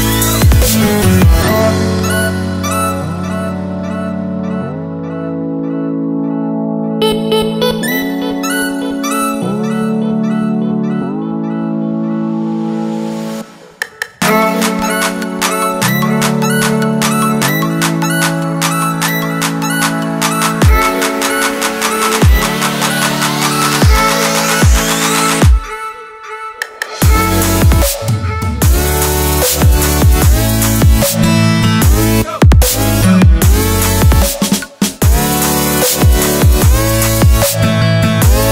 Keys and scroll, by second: 11.1 Page_Down, 13.0 Page_Down, 13.3 Page_Up, 13.7 Page_Up, 14.4 Page_Up, 14.7 Page_Up, 15.6 Page_Down, 15.8 Page_Down, 19.2 Return, 19.3 1, 20.9 2, 22.5 3, 25.2 5, 27.4 0, 30.7 p, 34.2 x.